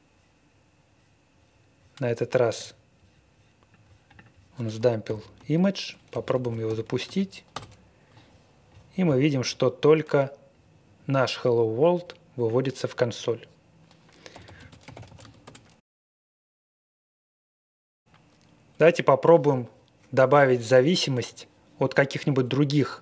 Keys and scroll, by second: 5.0 ctrl+l, 5.8-7.5 typing, 14.0-15.5 typing, 18.0 typing.